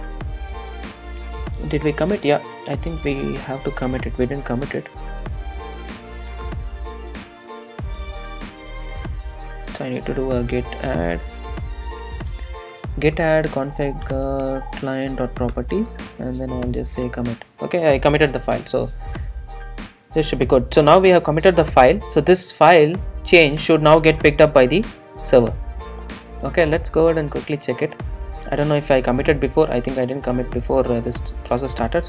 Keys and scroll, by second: 3.0 super+s, 19.6 super+s, 23.3 super+s.